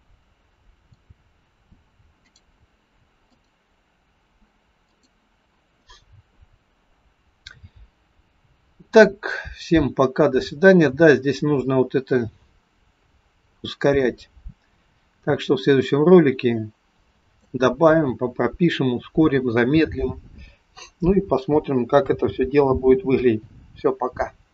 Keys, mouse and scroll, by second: 2.2 click, 3.3 click, 8.7 click.